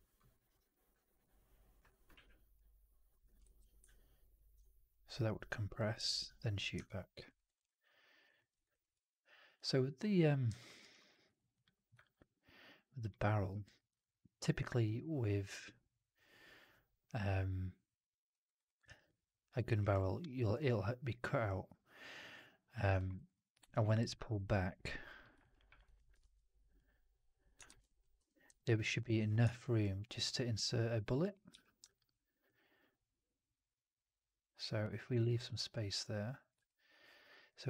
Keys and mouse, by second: 0.2 alt+right drag, 0.4 alt+right drag, 0.6 alt+drag, 1.0-3.3 drag, 3.3 ctrl+z, 6.0 ctrl+z, 6.7-7.1 drag, 7.1 right drag, 7.3 right drag, 7.5-8.1 drag, 8.3 middle drag, 8.4 right drag, 8.6 click, 10.5 alt+middle drag, 10.7 alt+right drag, 10.9 alt+right drag, 11.4-11.8 drag, 11.9 alt+right drag, 12.1-12.9 alt+drag, 13.1-13.4 alt+middle drag, 13.5-18.2 alt+drag, 18.3 alt+right drag, 18.5 alt+middle drag, 18.7 alt+right drag, 18.9-19.4 alt+drag, 19.6 alt+middle drag, 19.7 alt+right click, 19.9-20.3 alt+drag, 22.8 alt+middle drag, 23.0 alt+right drag, 23.2 alt+drag, 25.3 alt+right click, 25.4 alt+click, 25.7 1, 26.1 shift+x, 26.6 click, 27.5 shift+x, 27.7 alt+click, 28.1 4, 28.5 alt+middle click, 29.0 1, 31.4 4, 31.7 alt+click, 34.4-36.4 drag, 36.5-37.4 alt+drag.